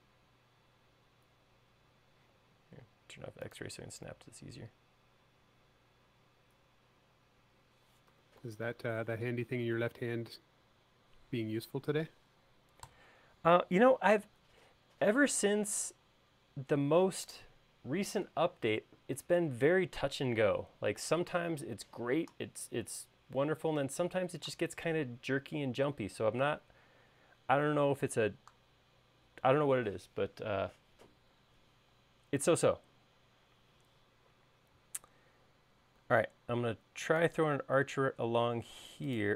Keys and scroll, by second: 8.0-9.3 typing, 11.5-12.9 typing, 14.4 space, 36.1 a.